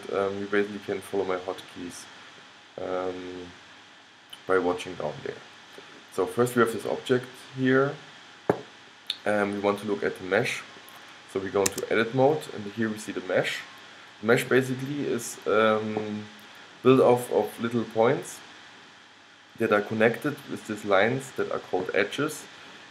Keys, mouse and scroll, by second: 0.3-2.2 middle drag, 2.6-4.6 middle drag, 5.9-7.4 middle drag, 8.2 middle click, 11.9 Tab, 13.1-15.0 middle drag.